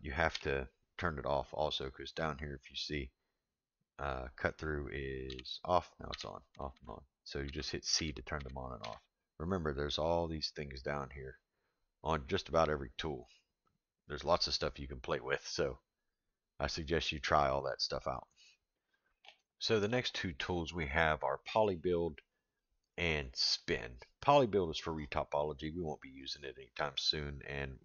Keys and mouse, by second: 0.3 k.